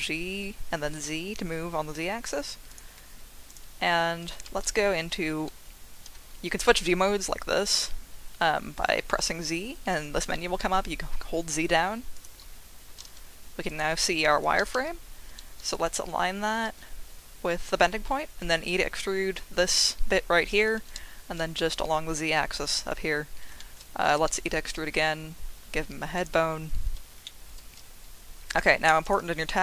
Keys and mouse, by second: 0.3 z, 2.7 click, 3.5 click, 4.6 z, 6.4 z, 8.4 z, 9.0 z, 13.7 click, 14.6 g, 14.7 z, 15.7 click, 16.6 e, 20.9 z, 22.5 click, 23.6 shift+middle click, 24.3 e, 24.3 z, 26.1 click, 27.2 shift+middle click, 29.0 click.